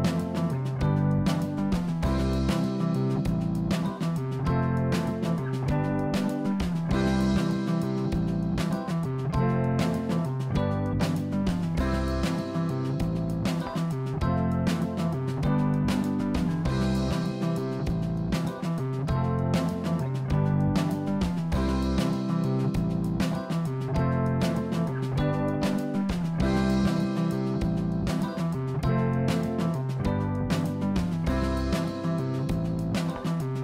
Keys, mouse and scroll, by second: 0.2 s, 3.2 r, 8.7 click, 10.8 click, 11.6 click, 12.2-13.4 scroll up 2, 13.4-14.0 scroll down 2, 14.0 click, 15.4 click, 15.9-17.0 drag, 17.0 KP_0, 18.0 click, 19.1 click, 20.0 g, 22.2 click, 23.0 click, 24.0 g.